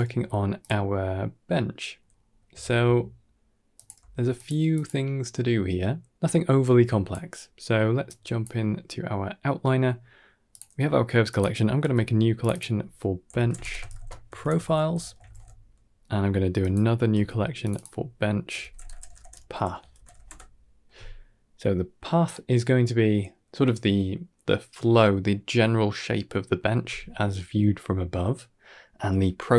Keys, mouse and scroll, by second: 0.8 middle click, 1.9-2.2 scroll up 4, 2.2 scroll down 1, 2.5 ctrl+s, 3.6 click, 3.8 g, 4.6 click, 5.8-7.3 drag, 7.9-8.3 drag, 10.3 click, 11.1 click, 11.7 c, 12.3 click, 12.4-15.2 drag, 16.5 click, 17.0 c, 17.5 click, 17.6-20.1 drag, 18.8 BackSpace.